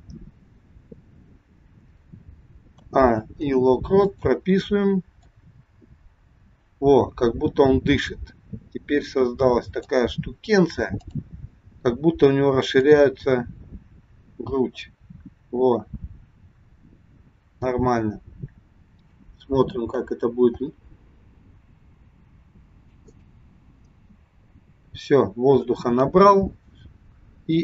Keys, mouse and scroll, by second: 2.7 a, 3.3 i, 5.3 click, 11.1 click, 12.8 click, 20.7 space, 23.8 space.